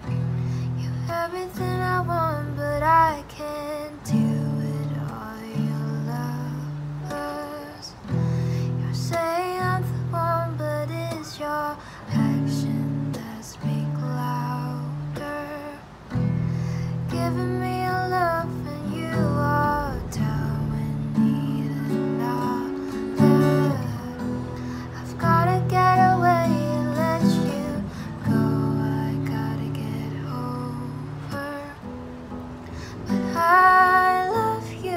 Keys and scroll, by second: 0.0 space, 0.3 r, 13.0 ctrl+alt+shift+c, 13.8 Return, 15.7 ctrl+z, 17.0 ctrl+alt+shift+c, 21.7 ctrl+alt+shift+y.